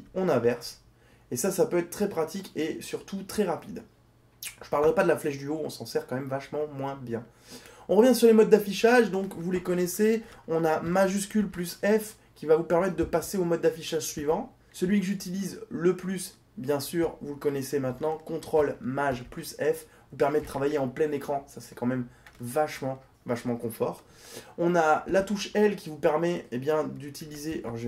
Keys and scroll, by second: 10.9 shift+f, 16.8 ctrl+shift+f, 26.4 l.